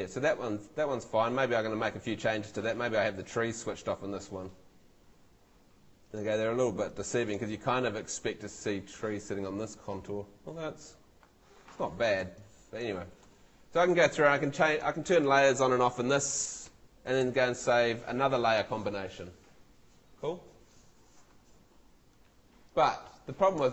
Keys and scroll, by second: 17.2 super+l.